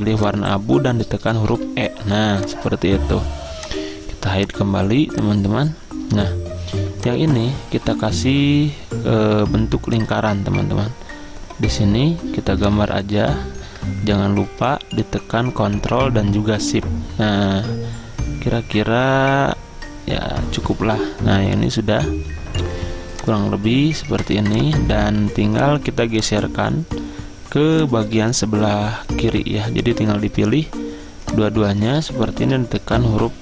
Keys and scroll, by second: 1.5 e, 4.7 z, 32.4 ctrl+z.